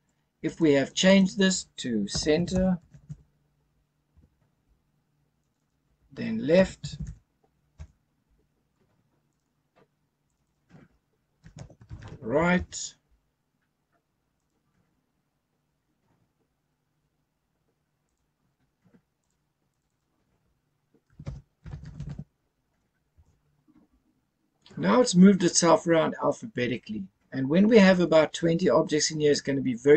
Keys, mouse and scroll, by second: 0.4 click, 0.9 click, 1.1-4.1 drag, 5.4 click, 5.5-7.7 drag, 9.2 click, 10.2 click, 10.4-12.5 drag, 14.3 click, 18.0 click, 19.2 click, 19.7 click, 19.8-23.1 drag.